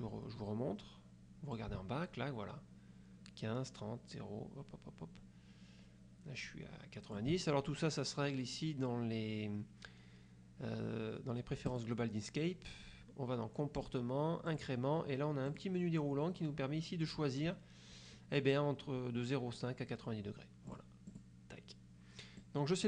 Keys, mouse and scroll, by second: 1.6-7.4 ctrl+drag, 11.8 click, 13.9 click, 14.6 click, 15.6 click, 20.8 click, 21.2 click, 22.5 click.